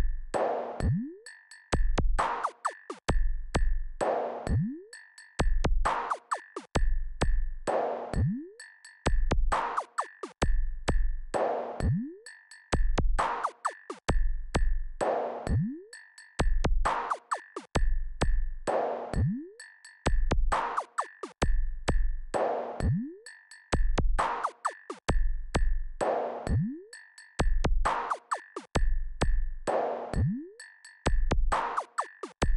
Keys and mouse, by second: 1.1 KP_Subtract, 1.4 KP_Subtract, 6.4 click, 9.4 ctrl+KP_6, 9.8 ctrl+KP_6, 12.0 ctrl+KP_8, 12.2 ctrl+KP_8, 12.7 KP_Add, 13.2 KP_Add, 14.8 KP_2, 16.2 KP_6, 16.4 KP_6, 22.8 click, 26.8 click, 31.3 click.